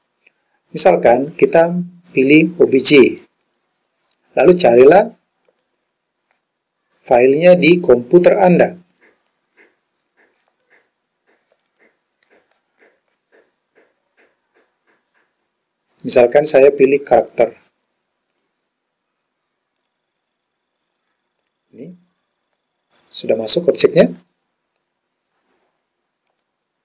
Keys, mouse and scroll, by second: 20.5-20.9 scroll up 3, 20.9-21.9 scroll down 1, 21.9-22.6 scroll up 1, 22.6-23.8 scroll down 1, 26.3-26.8 drag.